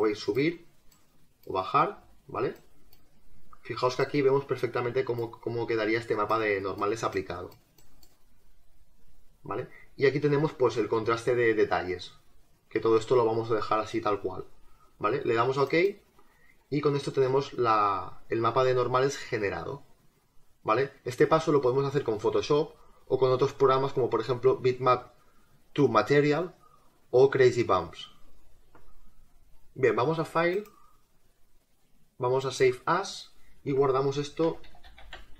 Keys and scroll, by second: 34.5-35.3 typing.